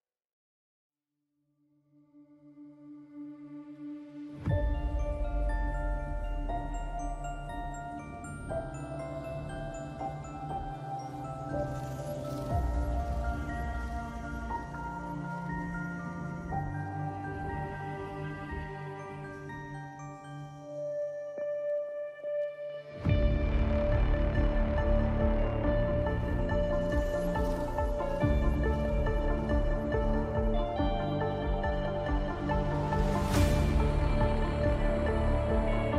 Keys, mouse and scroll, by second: 14.8 click.